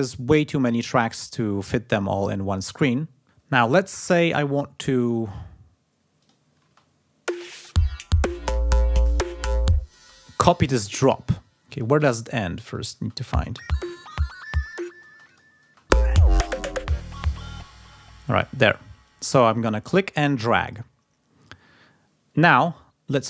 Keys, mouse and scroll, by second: 6.0 click, 6.4 space, 7.8 ctrl+scroll up 2, 9.7 ctrl+space, 12.6 click, 12.7 space, 14.8 space, 15.1 click, 16.1 ctrl+scroll up 2, 16.6 ctrl+scroll down 2, 17.6 space, 18.8-20.7 drag.